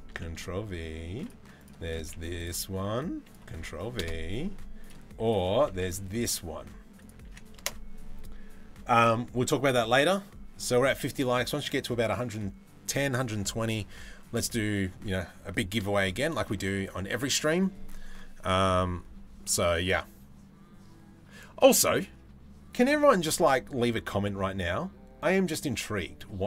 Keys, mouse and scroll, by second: 15.8 shift+middle click, 16.4 middle click.